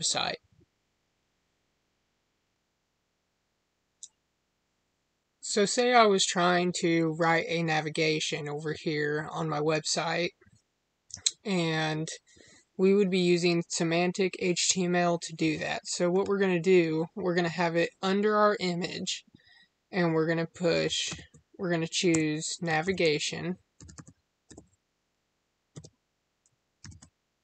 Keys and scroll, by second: 25.6 Tab.